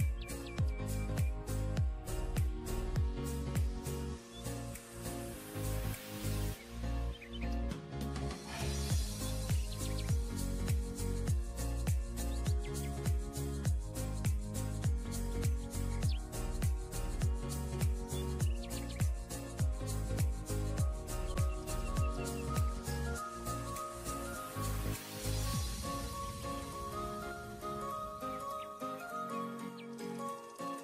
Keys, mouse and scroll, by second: 12.1 alt+scroll up 1, 13.5-13.9 alt+scroll down 1, 13.9-14.3 alt+scroll up 1, 14.3 scroll down 1, 17.7 double click, 22.0 scroll down 1, 22.2 scroll up 1, 23.5 alt+scroll down 1, 26.4-27.1 alt+scroll down 1, 27.6-28.1 alt+scroll down 1, 28.2 ctrl+click, 28.7 ctrl+e, 29.7 alt+scroll up 1, 29.9-30.4 alt+scroll down 1.